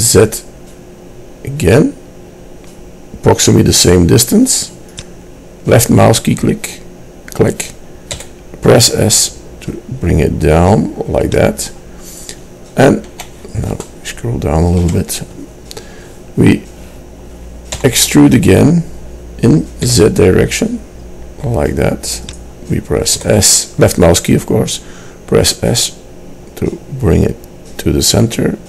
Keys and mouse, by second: 8.2 s, 14.0-17.9 middle drag, 17.9 e, 23.3 s.